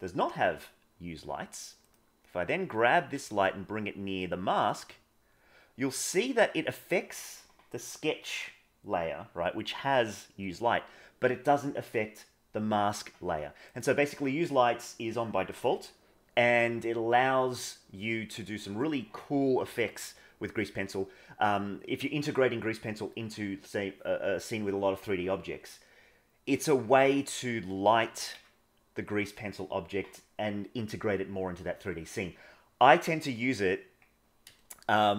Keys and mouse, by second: 1.8 click, 2.8 g, 28.1 g, 34.5-35.1 shift+middle drag.